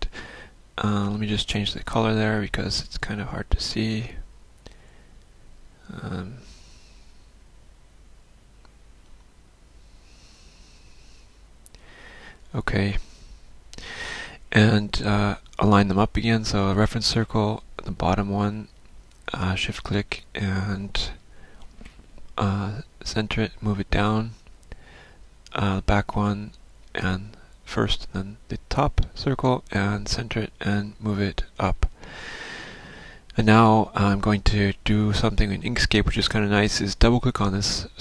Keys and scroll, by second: 23.7 ctrl+shift+a.